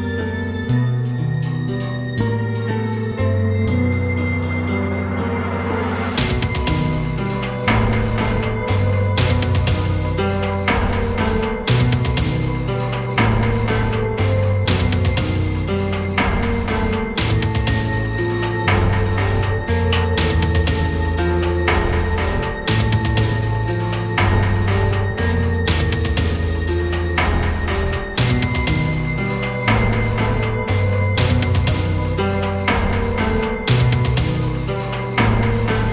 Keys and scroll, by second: 0.7 p, 6.7 ctrl+alt+z, 26.0 Up.